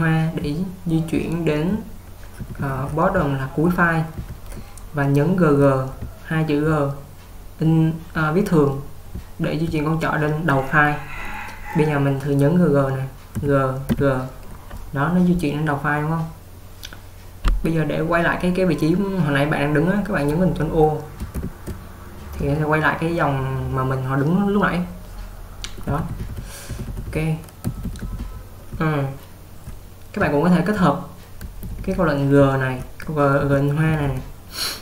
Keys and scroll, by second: 13.2-14.0 typing, 21.6 ctrl+o, 26.0-34.8 typing.